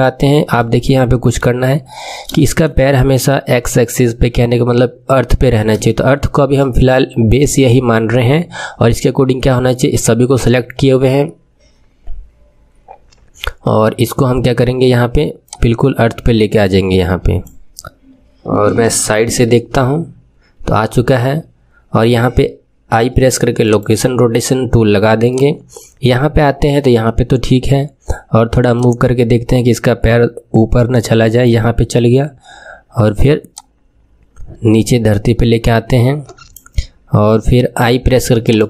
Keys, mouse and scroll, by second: 0.8-1.7 shift+middle drag, 1.7-2.3 scroll up 4, 2.3-5.3 shift+middle drag, 5.3-5.8 scroll down 1, 5.8-8.8 shift+middle drag, 9.4-11.1 scroll down 1, 11.1-12.6 scroll down 1, 13.6-14.3 scroll up 4, 14.3-15.4 scroll down 1, 15.4 click, 19.3 KP_3, 22.9 i, 25.3-28.3 drag, 28.7-34.2 drag.